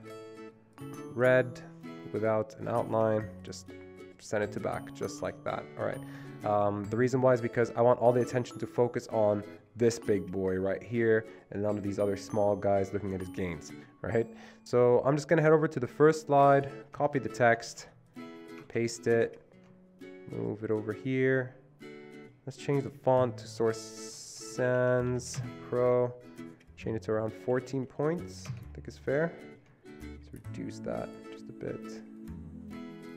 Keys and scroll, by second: 17.1 Escape, 17.8 Escape, 17.8 ctrl+c, 18.8 ctrl+c, 23.0 ctrl+v, 24.4-26.0 typing, 27.4-28.1 typing, 30.1 typing.